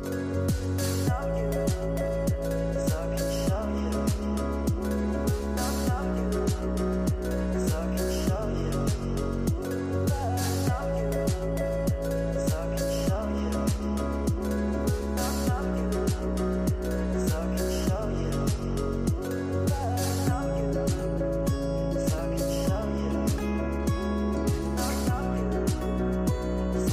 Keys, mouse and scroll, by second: 1.7-3.4 right drag, 3.4-5.2 drag, 5.2-8.2 right drag, 8.6-13.9 drag, 15.0-16.9 right drag, 16.9 click, 19.8 scroll down 2, 21.1-21.9 drag, 21.9-26.9 typing.